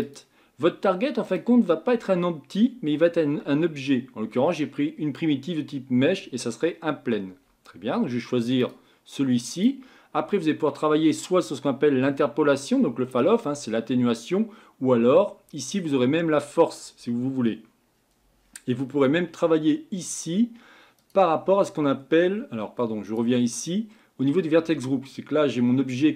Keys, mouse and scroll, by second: 0.0-1.3 drag, 8.6 click, 21.0 click, 21.5-21.9 scroll up 2, 21.9-23.1 scroll down 1, 23.1 click.